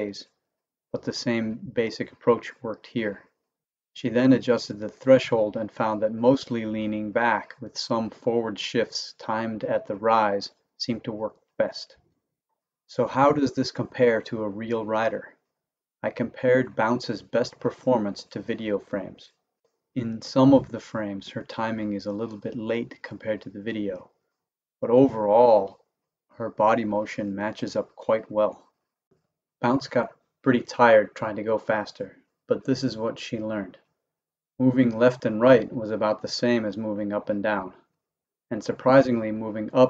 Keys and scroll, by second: 0.6 Right, 1.2 Left, 2.1 Right, 2.6 Left, 3.4 Right, 3.9 Left, 4.8 Right, 5.2 Left, 6.0 Right, 6.5 Left.